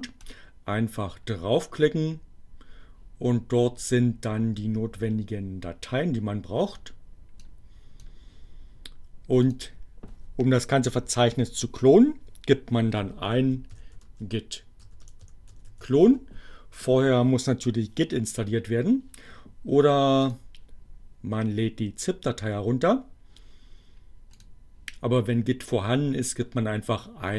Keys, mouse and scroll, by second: 7.4 click, 9.4 click, 12.5-15.9 typing, 20.3 click, 24.3 click.